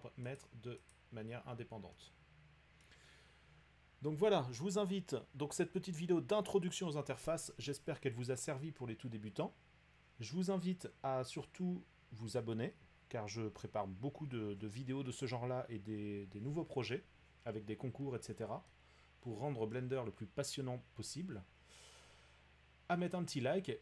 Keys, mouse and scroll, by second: 0.4 click, 1.0 click, 2.8 middle click, 19.7-23.8 middle drag.